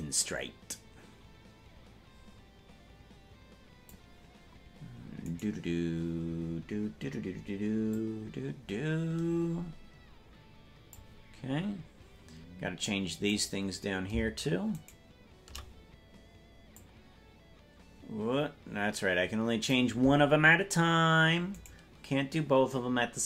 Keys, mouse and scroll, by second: 5.5 right click, 7.9-11.0 drag, 11.5-12.0 scroll down 1, 12.0-13.0 scroll down 2, 12.1-13.0 scroll up 2, 13.5-15.8 right drag, 16.7-19.7 drag, 21.8 right click.